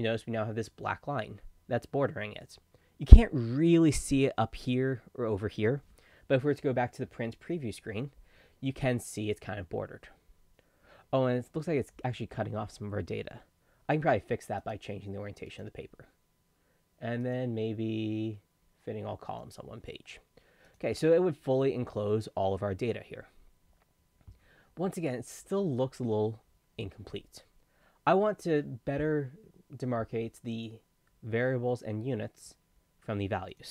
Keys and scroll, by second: 7.1 ctrl+p.